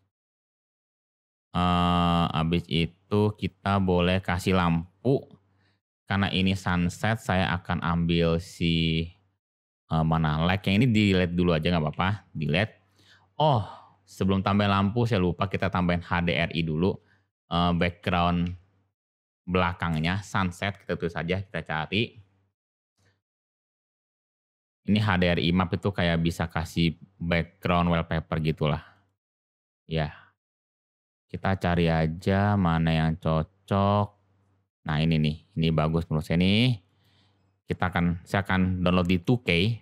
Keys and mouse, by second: 2.6-3.6 middle drag, 6.3 shift+a, 15.4 click, 16.4-27.8 drag.